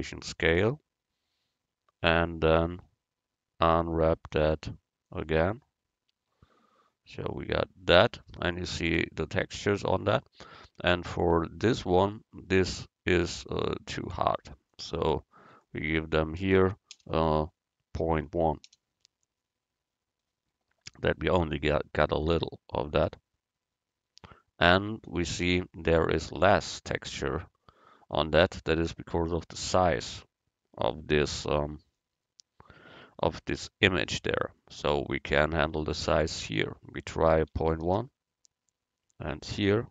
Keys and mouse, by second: 2.7 Tab, 3.7 u, 14.8-16.7 drag, 22.3-24.1 drag, 23.4 right click, 36.5-38.2 drag.